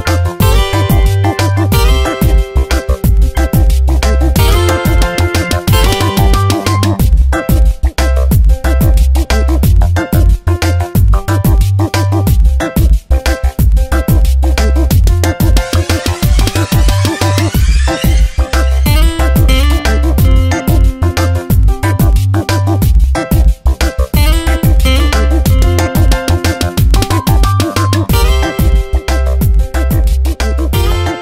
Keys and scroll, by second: 2.1 s, 5.5 v, 6.3 ctrl+z, 6.5 a, 12.0 space, 12.5 v, 17.0 space, 19.9 space, 23.6 space, 26.7 v, 29.0 s.